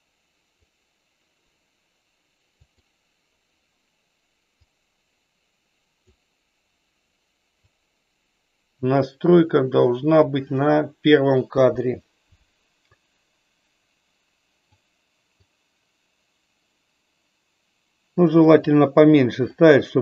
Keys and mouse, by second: 2.8 click, 4.5-6.0 drag, 7.8-10.2 drag, 12.8-14.7 drag, 15.5-18.2 drag, 19.5-20.0 middle drag.